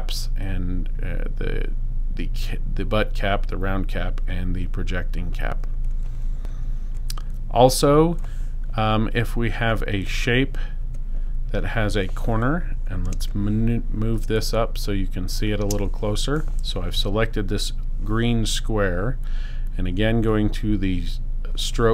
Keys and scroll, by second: 13.1 space.